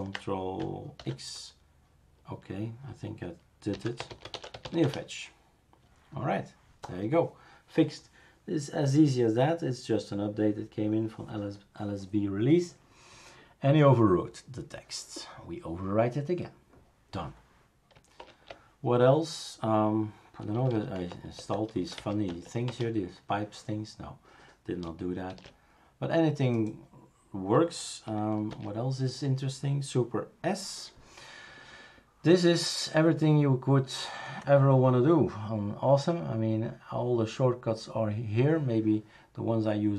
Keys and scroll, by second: 1.0 ctrl+x, 3.5-5.1 typing, 18.2 super+Return, 20.3-22.3 typing, 21.3 Tab, 22.7 Return, 25.3 shift+super+q, 28.5 super+s.